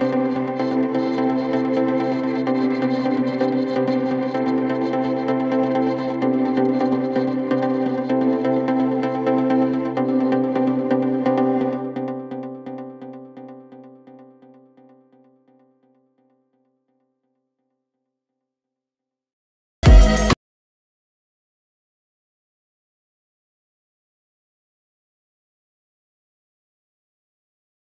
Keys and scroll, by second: 27.8 shift+Home.